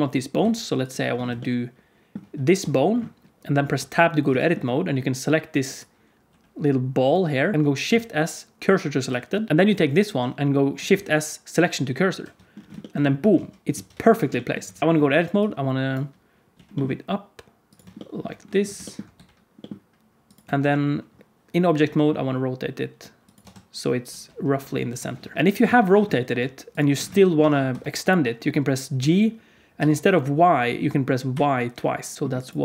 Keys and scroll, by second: 0.3 Tab, 2.5 Tab, 3.7 Tab, 6.2 g, 7.8 shift+s, 9.5 Tab, 10.9 shift+s, 13.3 alt+z, 13.6 alt+z, 14.7 alt+a, 14.8 Tab, 14.8 q, 16.5 g, 19.1 g, 20.4 Tab, 21.8 r, 23.4 Tab, 24.0 g, 25.3 Tab, 26.0 r, 27.6 Tab, 28.9 g, 32.1 Tab, 32.1 alt+z, 32.1 alt+a, 32.1 ctrl+s.